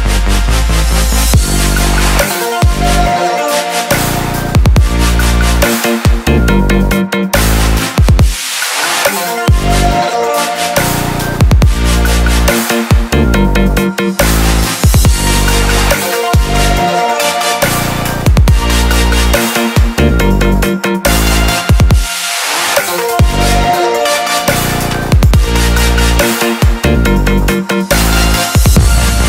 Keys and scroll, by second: 19.4 ctrl+0.